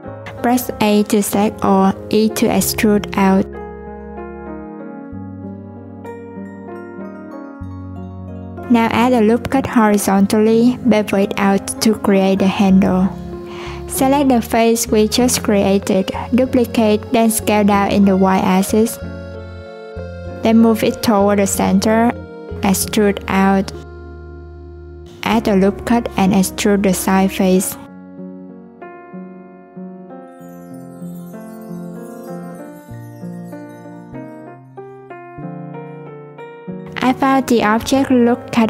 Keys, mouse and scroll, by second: 0.2 a, 3.9 a, 5.1-7.0 drag, 7.0-7.4 scroll down 2, 7.4 Tab, 7.5-9.4 scroll up 6, 7.7 Tab, 9.4 ctrl+r, 12.4-12.9 scroll up 2, 12.9 3, 13.4 click, 15.7 shift+d, 17.8-18.6 scroll up 2, 18.6 s, 21.7 click, 23.4 e, 26.5 ctrl+r, 27.1 click, 28.0 e, 30.9 click, 32.0 a, 32.3 scroll down 2, 33.5-34.8 drag, 34.8-35.3 scroll down 1, 35.3 Tab, 36.2 click, 37.6-38.6 drag.